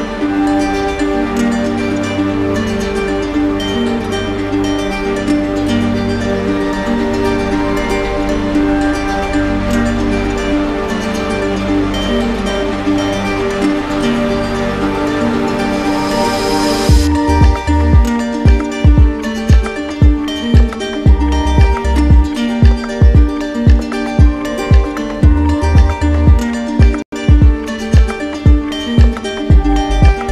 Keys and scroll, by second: 2.0 ctrl+z, 4.0 ctrl+alt+z, 26.8 ctrl+z.